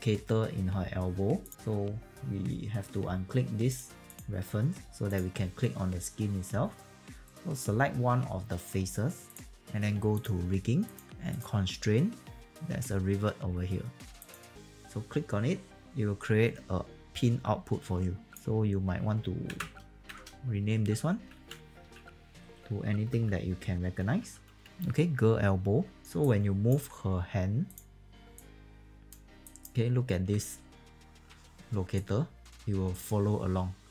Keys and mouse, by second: 3.6 click, 10.1 click, 11.8 click, 14.1 click, 18.3 click, 22.2 g, 24.2 e, 26.1 alt+click, 27.6 click, 28.2 alt+click, 29.4 alt+click, 31.2 w, 31.9 click.